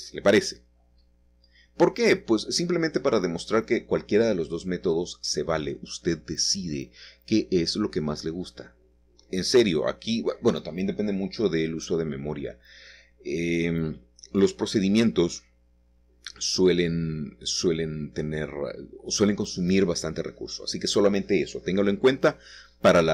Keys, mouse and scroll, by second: 9.7 click, 9.9 click, 11.4 click, 15.7 click, 17.0 shift+middle click, 17.8 middle click, 18.4 shift+middle click, 19.3 shift+middle click, 19.8 shift+click.